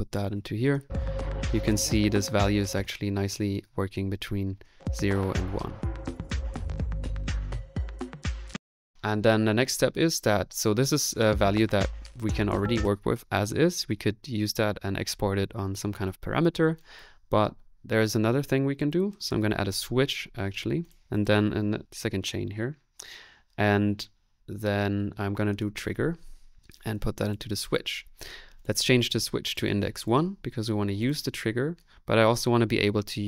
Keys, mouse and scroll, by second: 0.7-4.6 middle drag, 1.1 space, 7.5 middle click, 8.3 space, 18.9-19.6 typing, 25.2-26.1 typing.